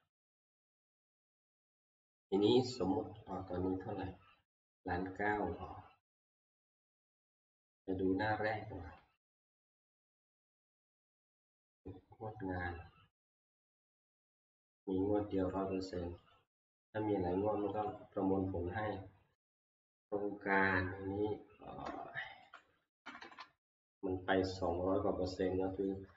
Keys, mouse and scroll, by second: 3.3 click, 3.9 click, 7.2 click, 7.3 click, 9.4 ctrl+click, 11.8 click, 15.6 click, 16.3 scroll, 16.3 click, 17.9 click, 19.5 click, 20.7 scroll, 22.6 click, 22.7 middle click, 22.9 Right, 23.1 Right, 23.3 Right, 23.4 Right, 25.0 Right, 25.9 click.